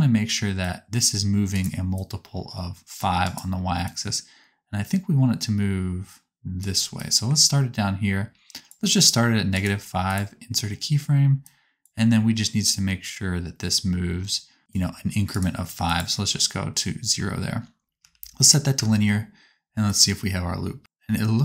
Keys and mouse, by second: 2.0-3.3 drag, 3.3 middle click, 3.9-9.6 drag, 9.6 right click, 17.0 a, 18.0 t, 18.7 space.